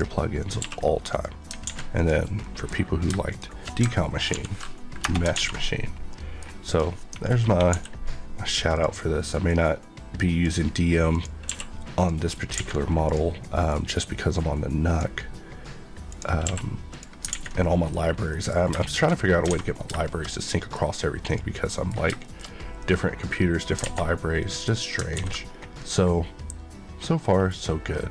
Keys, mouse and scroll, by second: 0.5 q, 1.0 click, 1.6 alt+a, 1.9 click, 2.4 middle click, 2.8 scroll, 3.0 shift+scroll down 1, 3.2 shift+click, 4.3 ctrl+l, 5.0 Return, 5.3 alt+a, 6.1 middle click, 6.7 click, 7.7 d, 8.7 click, 11.4 q, 11.9 click, 12.5 alt+a, 13.0 click, 16.4 q, 16.9 click, 17.3 alt+a, 17.6 middle click, 18.0 scroll down 1, 18.3 middle click, 18.6 scroll down 1, 18.8 middle click, 19.2 scroll down 1, 19.5 alt+a, 20.0 middle click, 21.3 click, 21.6 middle click, 22.4 shift+middle click, 22.9 middle click, 23.8 alt+a, 24.0-24.4 scroll down 1, 24.4 middle click, 24.8 scroll down 1, 25.1 ctrl+s, 25.4 scroll down 1, 25.8 middle click.